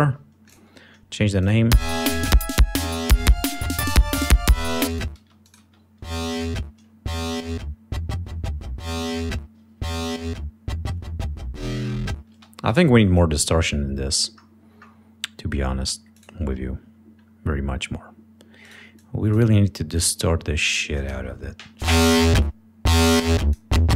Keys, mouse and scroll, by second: 0.4 click, 1.4 click, 1.7 space, 4.9 click, 5.2 space, 5.4 click, 6.3 click, 12.3 space, 12.7 right click, 14.4-15.0 scroll down 2, 16.1 click, 18.6 right click, 18.9 click, 20.0-21.2 drag, 21.8 l, 23.0 click.